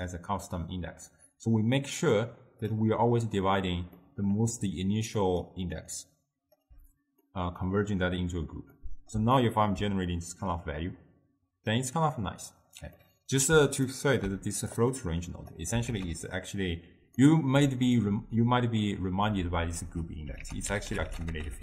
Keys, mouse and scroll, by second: 1.5 click, 4.0 middle click, 4.5 scroll up 1, 4.6-6.7 typing, 5.3 click, 6.0 click, 7.3-12.5 middle drag, 13.0-14.8 middle drag, 14.8 click, 16.0 ctrl+a, 17.6 d, 18.1 d, 18.2-19.3 drag, 19.3-20.0 d, 20.5 ctrl+a, 21.1 c.